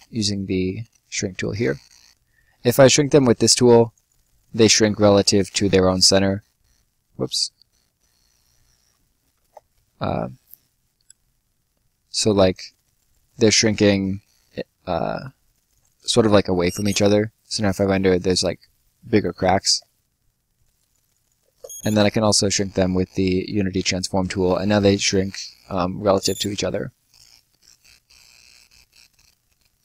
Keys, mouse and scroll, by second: 3.0 click, 5.9 ctrl+click, 5.9 ctrl+z, 7.9 right click, 8.4 middle click, 9.3 ctrl+y, 12.1 click, 16.3 space, 17.3 right click, 20.5 click, 21.3 space, 23.1 click, 25.9 space, 27.0 right click, 29.0 click.